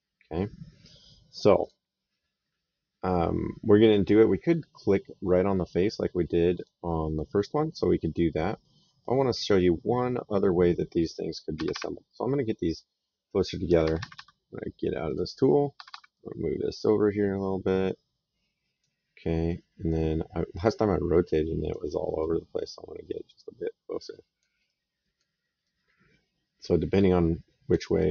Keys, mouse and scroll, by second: 1.4 click, 6.4 click, 10.5 middle click, 11.4 Escape, 13.2 click, 13.5 Escape, 14.9 click, 15.6 Escape, 16.0 click, 19.7 right click, 22.0 click, 24.5 right click, 25.5 click, 27.8 right click.